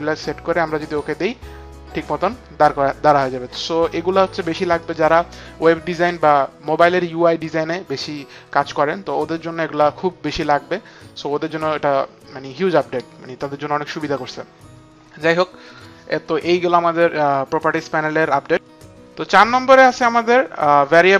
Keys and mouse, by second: 0.8 click, 4.0 click, 4.7 click, 15.6 click.